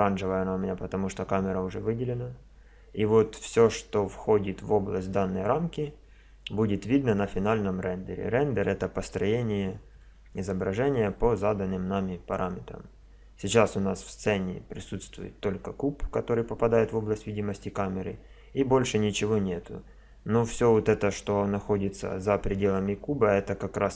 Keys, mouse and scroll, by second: 15.0-16.8 drag, 16.8 middle click, 16.9 middle click.